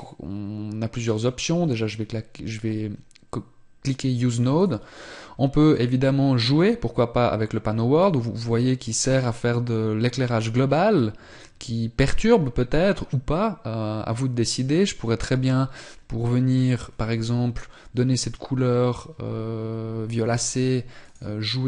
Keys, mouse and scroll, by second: 0.2 click, 21.5 click.